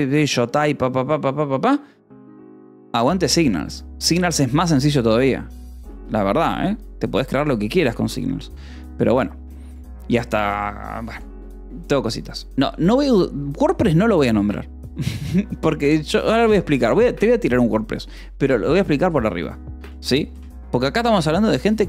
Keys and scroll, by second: 6.2 Return, 19.5-21.4 typing.